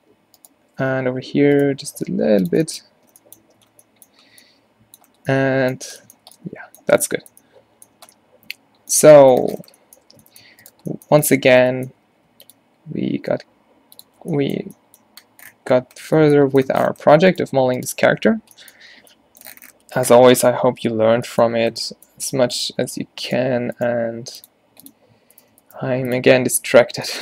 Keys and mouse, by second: 0.1 Tab, 1.1 o, 1.9 g, 2.6 Tab, 3.0 Tab, 3.5 Tab, 3.7 a, 6.0 a, 6.3 a, 10.2 Tab, 10.6 Tab, 10.8 Tab, 11.0 click, 12.1 ctrl+r, 12.1-14.0 right drag, 14.1 Tab, 16.6 Tab, 17.1 Tab, 17.7 Tab, 18.2 Tab, 18.8-21.8 drag, 18.8 a, 20.9 Tab, 21.9 click, 22.8 g, 24.0 w, 25.8 w, 26.4 middle click.